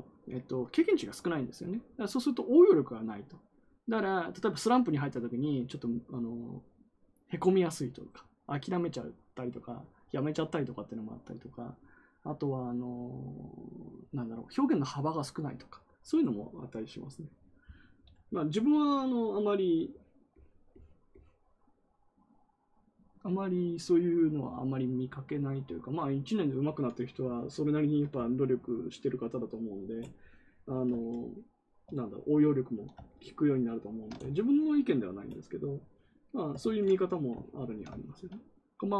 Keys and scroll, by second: 36.5 ctrl+z.